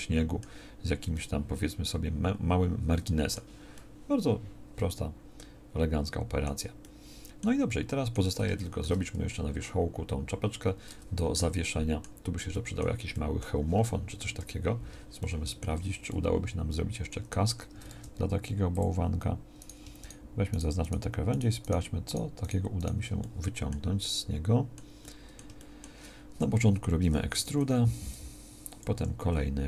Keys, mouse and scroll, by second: 10.9 Tab, 14.3 KP_1, 17.9 ctrl+Tab, 27.3 e, 28.9 e.